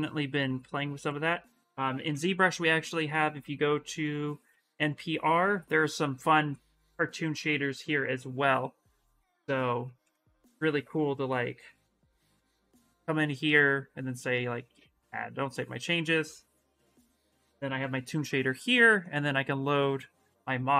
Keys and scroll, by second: 1.8 ,, 9.4 Return, 9.8 Return, 17.5 ,.